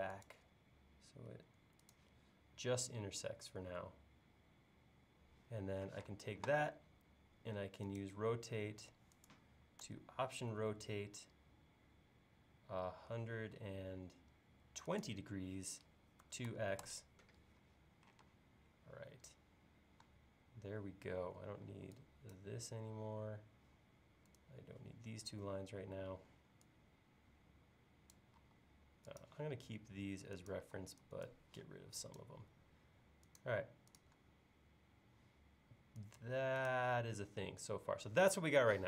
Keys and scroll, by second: 6.0 q, 16.0-17.0 typing, 18.3 space, 21.7 e, 28.4 l, 30.6 e.